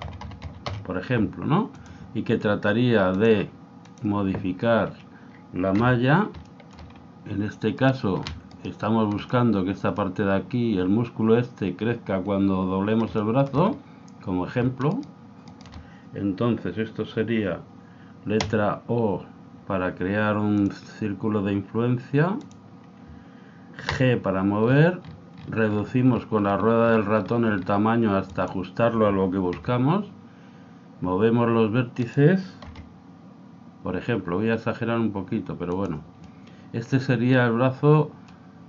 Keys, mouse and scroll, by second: 3.1 click, 5.8 a, 6.5-8.7 middle drag, 7.8-10.4 right drag, 9.2-11.1 middle drag, 13.2-15.5 middle drag, 14.9-17.3 right drag, 18.4 o, 20.6 click, 23.9 g, 29.6 g, 32.7 s, 36.3-38.0 middle drag.